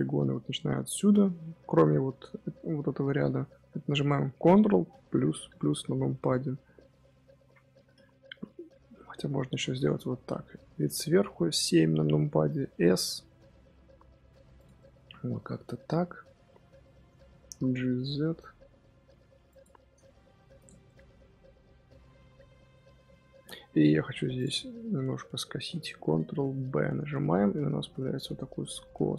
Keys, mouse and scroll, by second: 5.0 KP_Add, 5.4 KP_Add, 9.4 KP_7, 12.3 s, 14.7-17.3 middle drag, 17.3 g, 20.2 Tab, 20.3-20.8 scroll down 2, 20.5 click, 20.8-22.6 middle drag, 22.6-22.9 scroll up 2, 22.9 Tab, 23.1 middle click, 23.5 3, 24.3 click, 24.5 middle click, 24.8 scroll up 2, 25.1-26.1 middle drag, 26.1 ctrl+b.